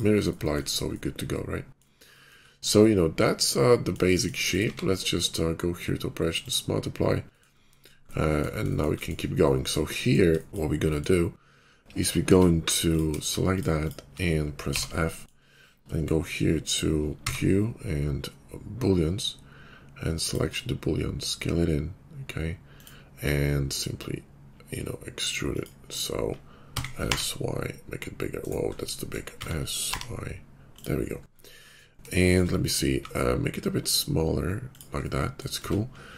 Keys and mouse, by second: 0.2 middle click, 1.5-4.6 middle drag, 4.6 q, 7.4-12.7 middle drag, 12.2 Tab, 14.6 f, 15.2-20.9 middle drag, 17.1 q, 20.9 click, 21.2-25.5 middle drag, 26.5 s, 29.3 s, 32.8-36.1 middle drag, 32.8 s, 35.5 Tab.